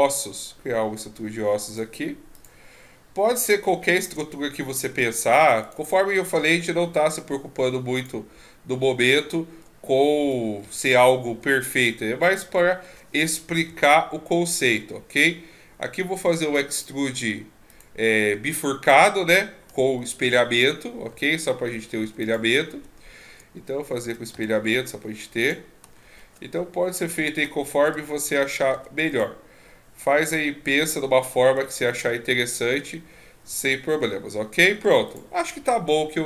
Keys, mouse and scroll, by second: 2.8-4.8 scroll up 15, 4.8 Tab, 5.6 right click, 6.3 e, 8.4-8.8 scroll up 1, 8.8 scroll down 2, 8.8 scroll down 3, 9.2 shift+scroll up 5, 10.2 e, 12.4 middle click, 13.7 KP_1, 16.7 click, 17.7 click, 20.2 shift+e, 24.0 e, 25.9-27.0 shift+scroll up 5, 27.0 shift+scroll up 2, 27.0 e, 30.2 e, 36.1-36.2 scroll down 2, 36.1 e.